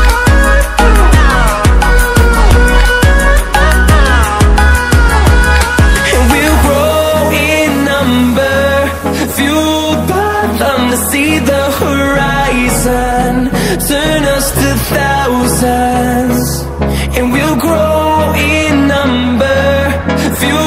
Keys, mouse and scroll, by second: 1.6 ctrl+w, 4.4 ctrl+w, 6.1-20.6 drag.